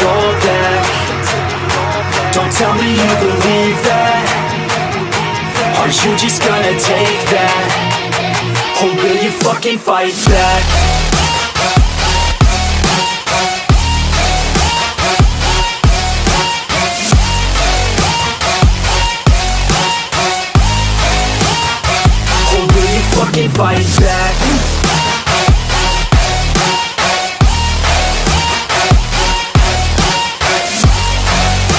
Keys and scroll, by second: 0.3 ctrl+u, 4.2 ctrl+u, 19.4 ctrl+t, 22.0 ctrl+t, 24.1 ctrl+j, 25.0 ctrl+t, 26.3 ctrl+t, 28.2 ctrl+j, 28.3 ctrl+t, 29.4 ctrl+j, 29.6 ctrl+t, 30.8 ctrl+e.